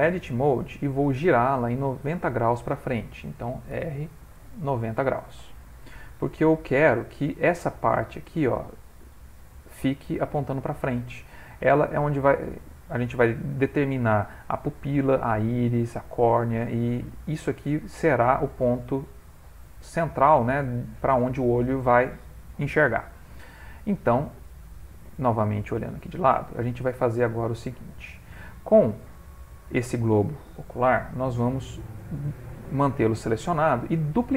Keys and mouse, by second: 0.0 Tab, 3.7 r, 6.8 middle click, 8.6 middle click, 8.7 middle click, 10.1 middle click, 16.6 middle click, 17.7 middle click, 18.6 middle click, 20.5 middle click, 23.0 middle click, 25.1 click, 26.3 ctrl+middle click, 26.6 ctrl+middle click, 27.1 shift+middle click, 30.6 shift+middle click.